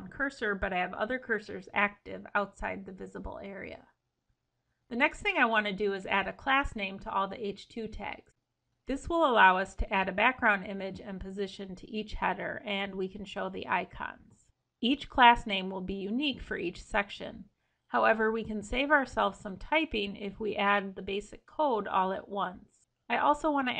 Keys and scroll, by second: 4.9 Escape, 8.7 ctrl+shift+Left.